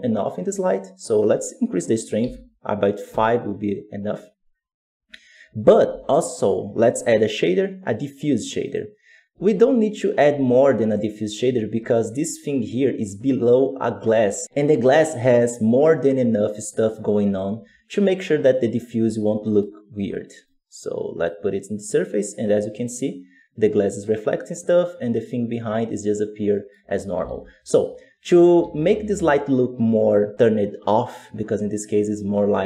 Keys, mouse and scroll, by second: 3.0 click, 5.1-8.7 scroll down 2, 8.7 shift+a, 18.4 right click, 21.2-32.6 drag.